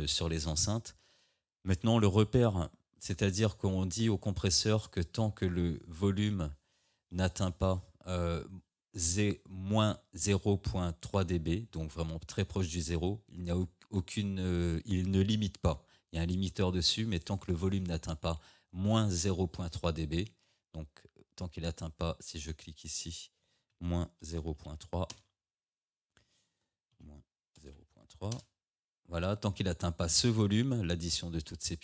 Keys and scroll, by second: 23.8 -, 25.2 Return, 27.0 -, 28.4 Return.